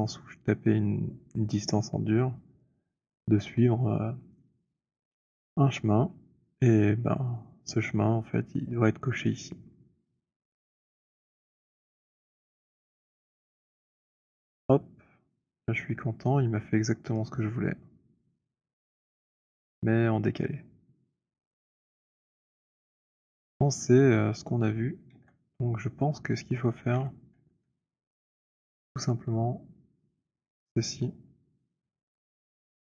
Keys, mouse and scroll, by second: 2.2 click, 12.6 click, 15.7 middle click, 15.9 middle click, 17.3 alt+middle click, 19.1 alt+click, 22.2 click, 23.0-23.9 scroll, 23.9 scroll, 24.7 w, 25.6 click, 26.9 e, 27.8 alt+middle click, 30.3 click, 30.3 w.